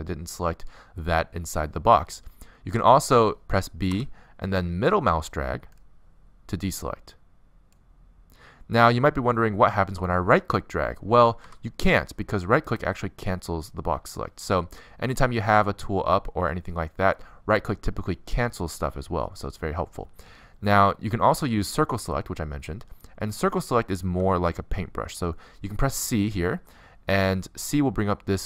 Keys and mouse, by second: 4.1 b, 19.3 a, 24.8 c.